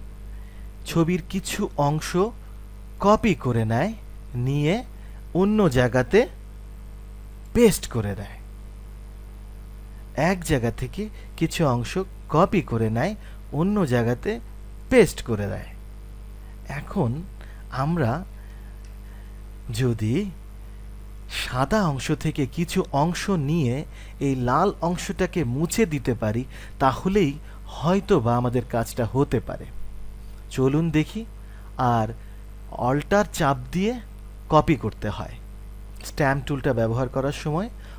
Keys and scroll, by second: 18.3 ctrl+alt+z.